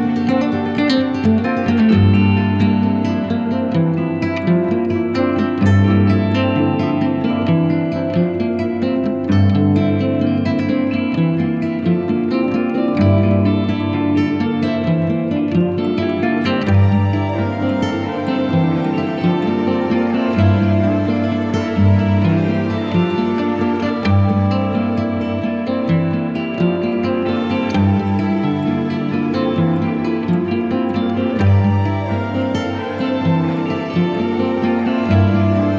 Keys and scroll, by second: 13.4 super+i, 14.4 b, 15.1 alt+b, 15.3 alt+^, 27.1 z, 30.7 b, 34.7 ctrl+alt+z, 35.4 z.